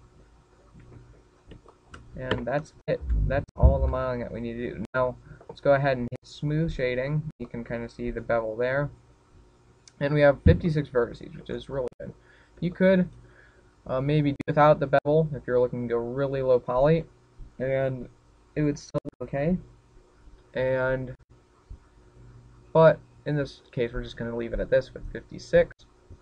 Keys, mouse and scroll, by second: 2.4 click, 2.7-3.9 scroll down 9, 3.3 shift+middle click, 3.9 Tab, 4.0-4.3 scroll down 3, 4.5 shift+middle click, 4.9 scroll down 1, 5.2 shift+middle click, 5.6 middle click, 8.2 click, 8.7-9.4 scroll up 5, 9.2 shift+middle click, 11.0 scroll down 1, 12.4 shift+middle click, 13.2-13.5 shift+scroll down 1, 13.5 middle click, 14.5 middle click.